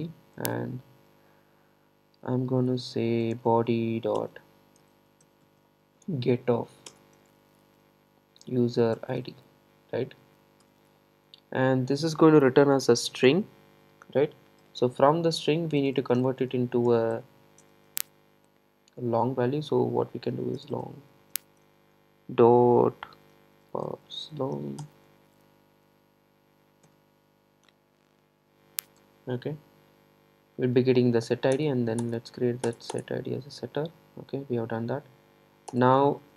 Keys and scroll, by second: 6.9 Return, 24.9 Return, 31.6 alt+Return.